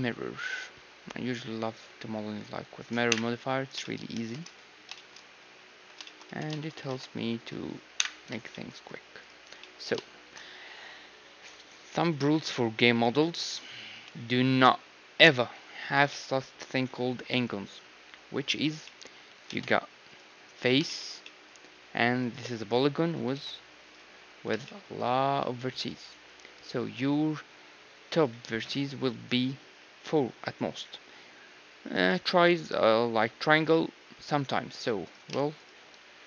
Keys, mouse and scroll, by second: 0.4-4.1 drag, 3.1 KP_1, 3.8-6.1 middle drag, 4.1 shift+space, 4.7 z, 5.7 z, 6.2 Tab, 6.9 ctrl+Tab, 7.9 KP_1, 9.1-12.1 middle drag, 9.2-11.2 drag, 13.9 KP_1, 17.9-20.4 middle drag, 19.4 ctrl+Tab, 20.4-24.0 right drag, 23.3 ctrl+Tab, 23.9-26.6 middle drag, 35.0-36.2 right drag.